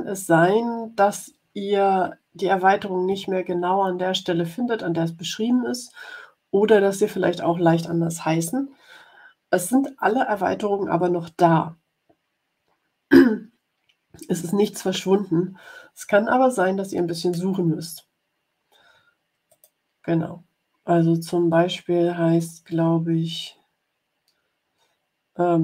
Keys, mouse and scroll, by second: 19.4 click.